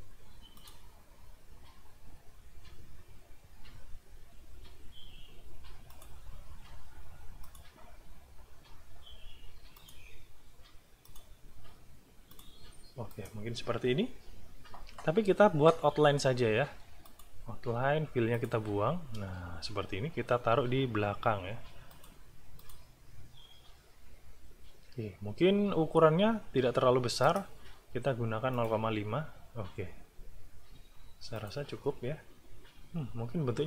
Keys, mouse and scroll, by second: 0.5 click, 5.9 click, 7.4 click, 9.7 click, 11.0 click, 12.3 click, 13.1 click, 13.4-16.3 scroll up 1, 17.1 shift+click, 18.3 click, 19.2 space, 21.9 click, 22.6 click, 27.2 right click, 28.5 click, 31.3 click.